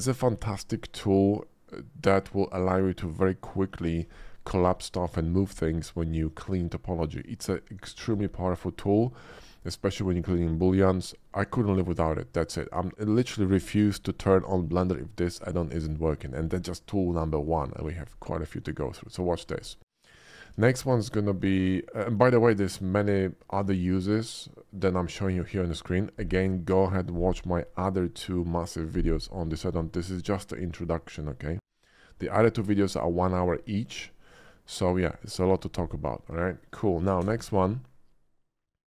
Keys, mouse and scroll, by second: 19.2 shift+middle click, 20.4 Tab, 20.8 x, 20.9 Tab, 36.5 shift+middle click, 36.8 shift+middle click, 37.2 shift+a.